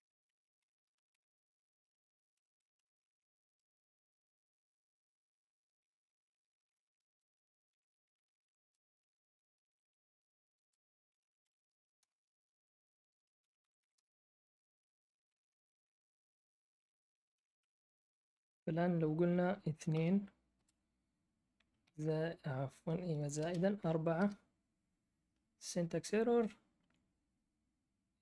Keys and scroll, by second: 0.0-3.9 typing, 2.3 Escape, 5.9-12.0 typing, 13.1-15.8 typing, 16.9-17.8 typing, 19.6-20.5 typing, 23.3-24.3 typing.